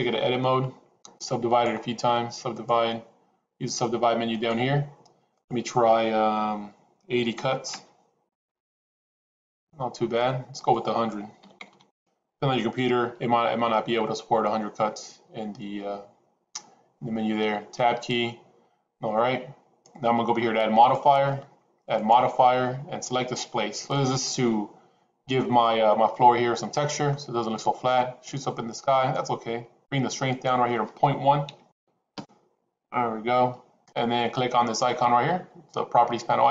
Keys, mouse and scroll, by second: 0.1 Tab, 1.5-2.8 right drag, 5.3-8.3 drag, 8.9 middle click, 10.5-12.9 drag, 11.7 KP_0, 17.7 Tab, 20.8 click, 21.9-24.4 drag, 26.1-27.1 middle drag, 30.3-33.9 drag.